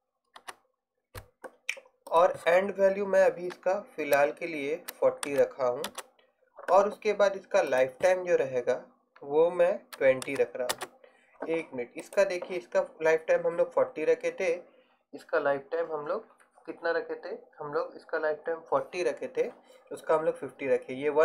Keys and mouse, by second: 4.0-7.8 middle drag, 11.7 middle click, 12.1-21.2 right drag.